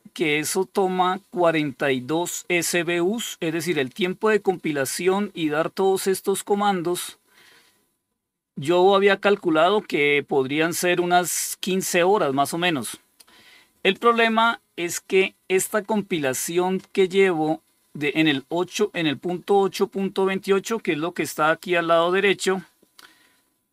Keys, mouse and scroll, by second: 2.6-4.5 drag, 5.2-5.8 scroll down 5, 6.3-6.9 scroll up 3, 8.4 click.